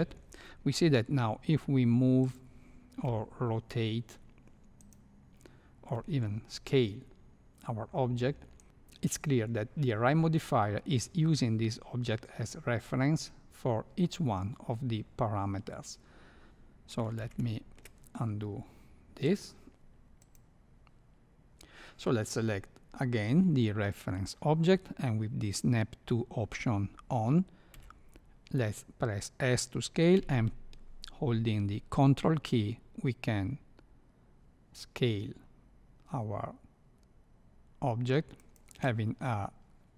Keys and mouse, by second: 0.7 g, 3.0 r, 5.9 s, 17.1 ctrl+z, 17.3 ctrl+z, 27.7 s.